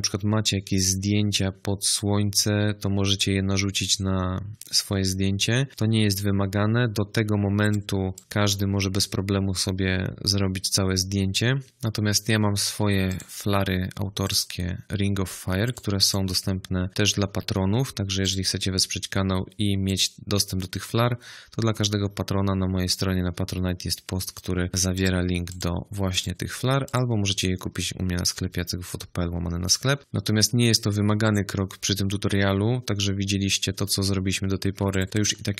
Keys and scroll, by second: 11.6 space, 34.8 space.